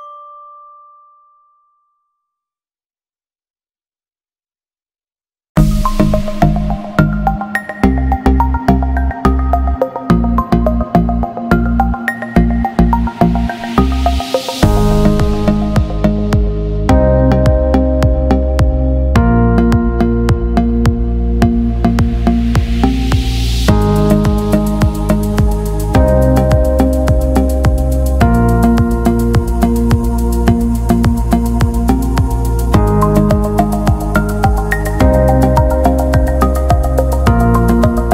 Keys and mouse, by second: 0.2 g, 1.6 right click, 2.1 g, 3.0 right click, 3.4 e, 4.3 r, 5.2 g, 6.0 r, 7.9 e, 9.2 r, 11.3 g, 13.3 e, 14.4 r, 15.5 g, 17.0 ctrl+r, 18.4 right click, 19.1 shift+right click, 19.8 shift+right click, 20.2 shift+right click, 20.8 f, 21.8 right click, 22.0 g, 24.4 right click, 24.8 g, 25.7 shift+right click, 26.7 shift+right click, 28.3 shift+right click, 29.0 shift+middle click, 29.5 ctrl+r, 31.3 g, 31.9 shift+middle click, 33.0 ctrl+r, 34.8 right click, 35.5 c, 36.7 g, 37.9 r.